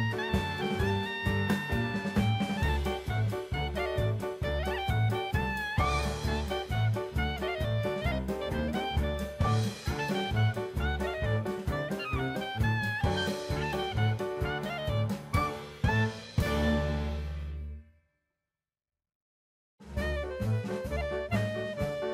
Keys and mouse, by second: 1.6-2.1 middle drag, 2.9-3.7 drag, 4.0-4.5 middle drag, 4.9-5.9 drag, 7.9 click, 8.4 shift+a, 11.1-11.9 drag, 12.4-12.9 drag, 13.4 drag, 14.3-15.7 drag, 16.1-18.9 drag, 19.5-20.0 middle drag, 20.5-22.1 drag.